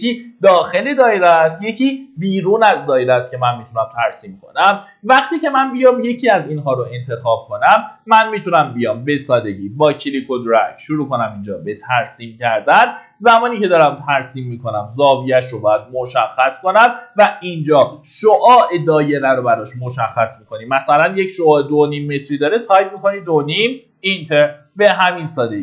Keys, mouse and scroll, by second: 5.6 click, 6.6 middle click, 7.5-8.2 scroll up 1, 9.2 click, 12.0 scroll up 1, 21.2 KP_2, 21.3 KP_Decimal, 21.6 KP_5.